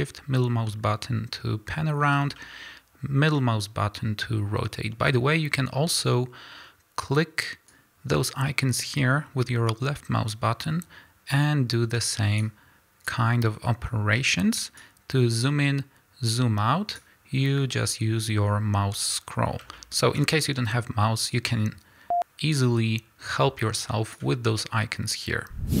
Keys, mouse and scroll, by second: 7.7-19.7 drag, 17.4 scroll down 1, 17.6 scroll up 1, 18.4 scroll down 1, 19.0 scroll up 1, 19.3-19.7 scroll down 1, 19.7-21.3 shift+middle drag, 21.3-25.8 drag.